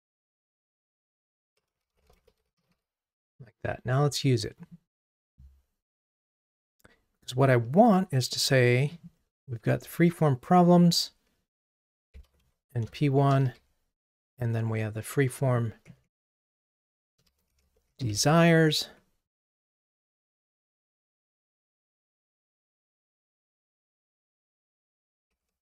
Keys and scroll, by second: 13.5 super+d.